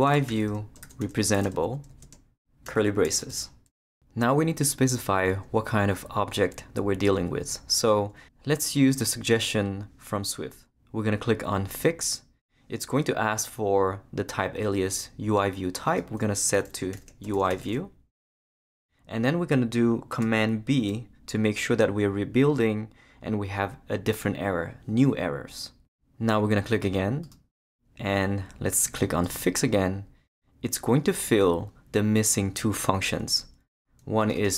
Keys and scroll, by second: 0.0-2.6 typing, 3.2 shift+Return, 3.8 Return, 16.7-18.1 typing, 20.7 super+b.